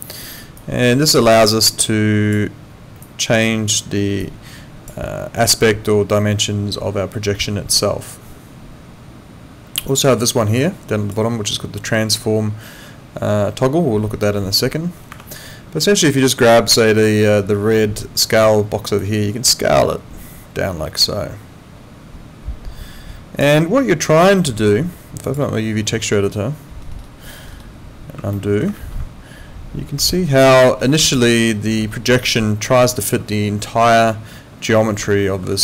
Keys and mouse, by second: 15.1 Escape, 19.0 click, 25.3 click, 28.3 alt+middle click, 28.7 ctrl+z, 30.1 alt+middle click, 31.1 alt+middle click, 35.4 ctrl+2.